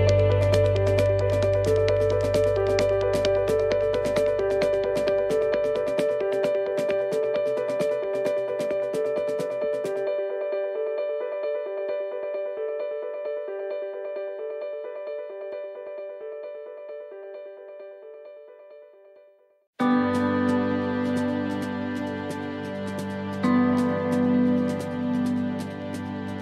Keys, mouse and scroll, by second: 0.3 shift+right click, 0.9 middle click, 2.6 shift+right click, 3.1 shift+right click, 3.4 shift+right click, 3.8 shift+right click, 4.8 shift+right click, 5.4 middle click, 6.1 scroll down 2, 6.7 shift+middle click, 7.9 shift+right click, 8.4 shift+middle click, 9.1 shift+middle click, 9.8 shift+middle click, 10.2-10.9 scroll down 5, 10.9 shift+middle click, 11.4 middle click, 13.6 f, 14.1 middle click, 15.0 shift+middle click, 16.1 middle click, 16.8 shift+scroll up 1, 16.8 shift+middle click, 17.6 scroll up 2, 18.0 middle click, 19.0 scroll up 1, 19.7 right click, 20.7 shift+right click, 21.2 middle click, 23.0 shift+right click, 23.5 shift+right click, 25.0 shift+right click, 25.7 shift+right click, 26.0 shift+right click.